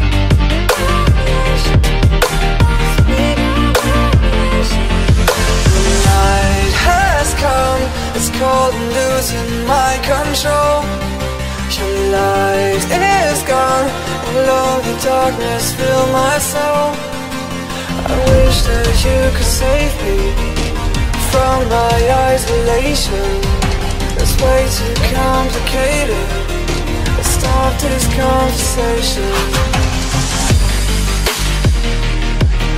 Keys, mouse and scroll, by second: 2.7 click, 3.1 middle click, 3.1 middle click, 3.7 middle click, 3.9 middle click, 4.5 middle click, 5.9 z, 7.9 click, 8.2 z, 11.2 click, 11.6 z, 12.1 middle click, 13.2 click, 13.7 click, 14.2 z, 18.2 click, 18.3 alt+Tab, 19.3 click, 19.5 click, 19.9 ctrl+z, 20.5 ctrl+alt+z, 22.2 click, 22.4-23.5 Delete, 23.5 click, 23.6 click, 23.8 ctrl+h, 24.0 ctrl+space, 24.7 alt+Tab, 26.9 click, 27.8 alt+Tab, 30.1 click, 30.4 middle click, 31.3 click, 32.0 click.